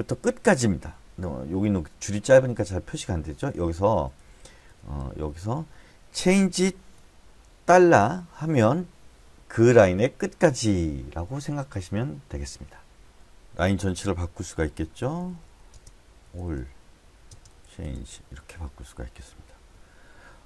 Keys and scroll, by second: 1.9 Escape, 3.5-3.9 typing, 5.5 typing, 6.9 c, 8.1 shift+4, 14.8-17.3 typing, 19.7 Escape.